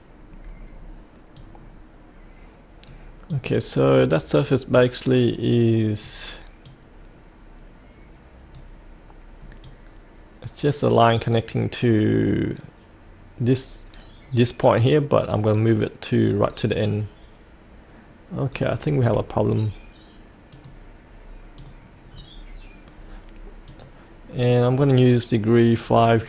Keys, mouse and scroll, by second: 19.2-20.5 scroll up 1, 20.5 click, 21.7 click, 22.2-23.7 scroll down 1, 23.7-26.2 drag.